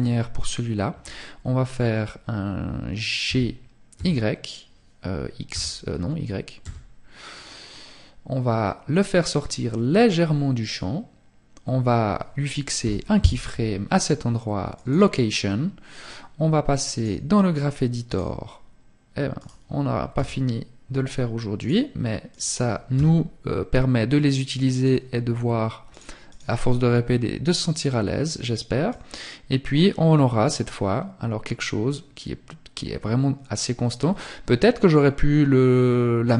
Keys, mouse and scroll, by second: 9.7 click, 15.9 click, 25.3 click, 27.9 click.